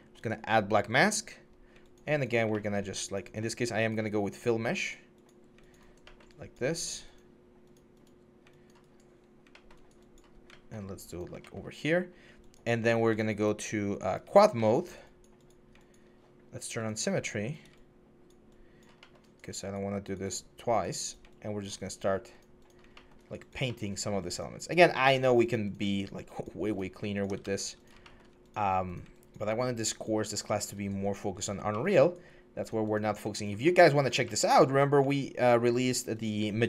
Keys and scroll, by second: 1.3 4, 9.0 1, 10.6 4, 11.4 1, 12.5 4, 13.0 ctrl+z, 27.2 ctrl+z.